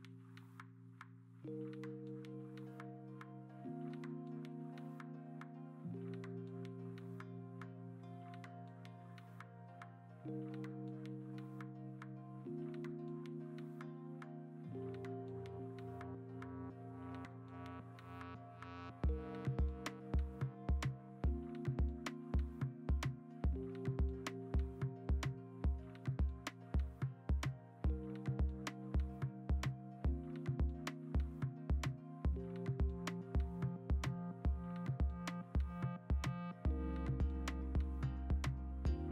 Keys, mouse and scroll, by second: 1.3 x, 2.2 x, 4.4 ctrl+z, 5.0 ctrl+z, 5.2 ctrl+z, 5.4 ctrl+z, 5.9 b, 6.6 Escape, 7.2 ctrl+z, 8.5 ctrl+z, 9.4 ctrl+z, 11.0-11.6 scroll, 14.4 alt+Tab, 14.6 Return, 14.9 ctrl+t, 16.3 ctrl+t, 19.1 v, 20.7 ctrl+t, 22.0 v, 22.3 ctrl+alt+z, 22.4 ctrl+alt+z, 22.9 ctrl+t, 23.3 ctrl+a, 23.9 ctrl+d, 24.1 ctrl+a, 24.2 v, 25.4 ctrl+d, 25.5 ctrl+a, 26.2 ctrl+d, 26.3 s, 27.3 0, 27.7 ctrl+z, 30.0 ctrl+z, 31.1 ctrl+w, 31.9 ctrl+w, 32.3 v, 34.2 ctrl+alt+g, 35.0 ctrl+alt+g, 37.3 ctrl+t.